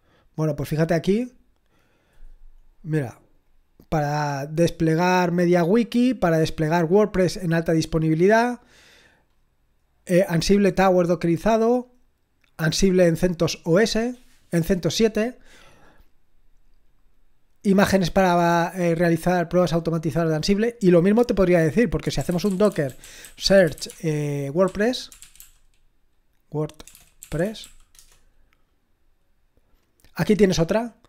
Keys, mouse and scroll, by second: 3.5-7.8 drag, 7.8-8.7 scroll up 1, 8.7-9.3 scroll up 1, 9.3-12.5 scroll up 1, 12.5-19.4 drag, 20.3-21.0 scroll down 6, 21.4 click, 21.8-28.1 typing.